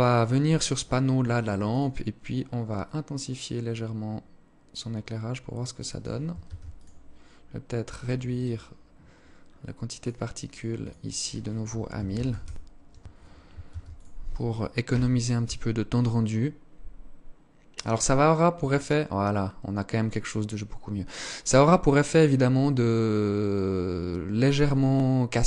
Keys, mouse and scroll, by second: 1.9 click, 5.5 ctrl+s, 7.5 right click, 8.5-9.2 scroll down 4, 9.0 click, 9.9 click, 12.7 ctrl+s.